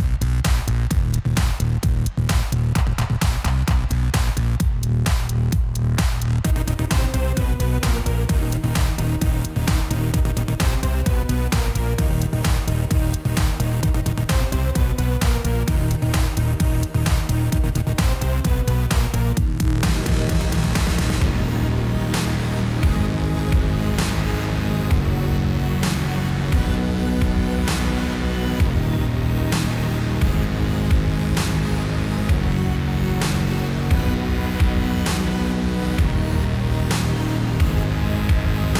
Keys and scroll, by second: 2.5 Tab, 11.1 Tab, 15.3 ctrl+r, 21.3 alt+a, 35.0 Tab.